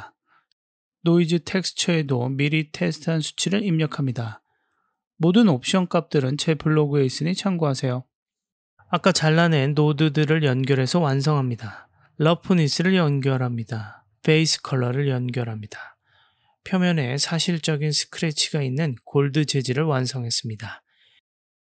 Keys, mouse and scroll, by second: 1.6 click, 3.7 click, 5.5 click, 6.9 click, 9.2 middle click, 10.2 click, 10.4-11.7 drag, 13.5 click, 13.7-14.4 drag, 15.7 middle click, 16.7 middle click, 19.0 click.